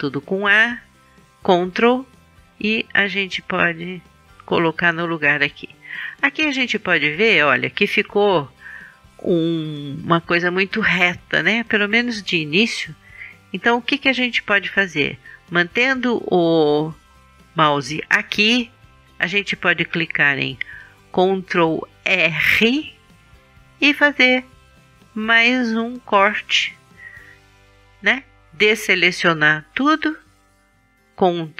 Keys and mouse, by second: 1.2-3.2 drag, 3.3-5.3 drag, 22.2 ctrl+r, 26.7-28.6 drag, 29.8 a, 31.4-31.5 drag.